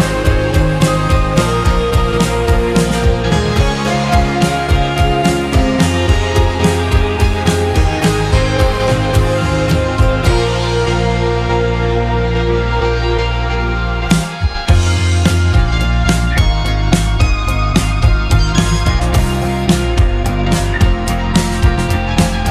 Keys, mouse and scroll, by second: 0.5-1.7 shift+middle drag, 1.7 g, 6.0-6.7 middle drag, 6.7-7.9 scroll down 1, 8.4-8.8 scroll up 2, 8.8-9.9 shift+middle drag, 9.9 Tab, 14.4 Tab, 15.2 ctrl+a, 15.7 click, 15.9 Tab, 16.8 i.